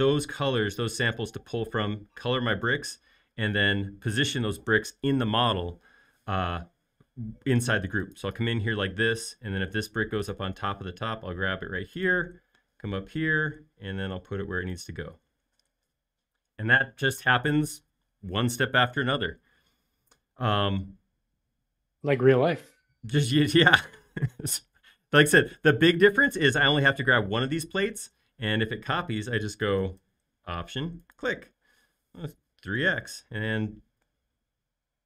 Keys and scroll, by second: 10.8 m, 20.6 space, 28.9 m, 32.4 typing, 32.9 Return.